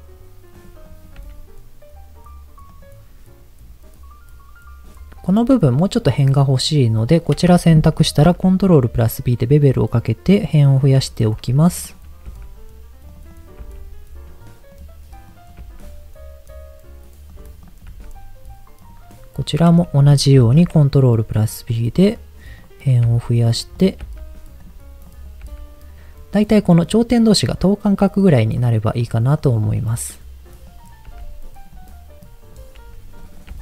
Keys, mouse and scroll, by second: 0.5 click, 0.9 click, 1.1 g, 2.7 click, 6.7 click, 8.1 ctrl+b, 9.1-10.1 scroll down 2, 10.7 click, 11.7 click, 12.3 g, 13.1 click, 13.3 click, 13.5 g, 14.7 click, 15.3 click, 15.6 g, 17.3 click, 17.6 click, 17.9 g, 18.8 click, 19.4 click, 20.3 ctrl+b, 21.9 click, 23.1 g, 23.5 click, 23.7 click, 24.1 g, 24.6 click, 25.1 click, 25.5 g, 28.5 click, 28.9 click, 29.3 click, 29.7 click, 30.6 click, 31.1 g, 32.1 click, 32.7 g, 33.1 click, 33.5 g.